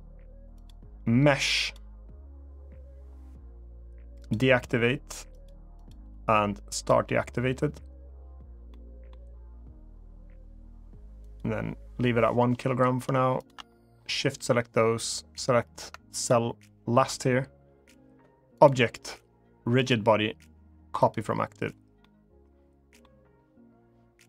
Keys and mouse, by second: 0.4-1.5 drag, 5.0 click, 5.5 click, 6.4 click, 8.4-8.8 middle drag, 11.1-12.5 drag, 13.2 shift+click, 16.0-16.8 ctrl+drag, 18.4-21.0 drag, 21.7-22.7 middle drag.